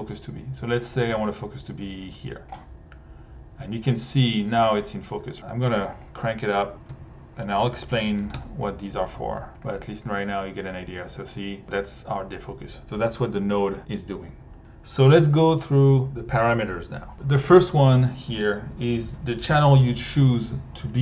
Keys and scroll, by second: 6.5-8.1 typing, 8.3 Return.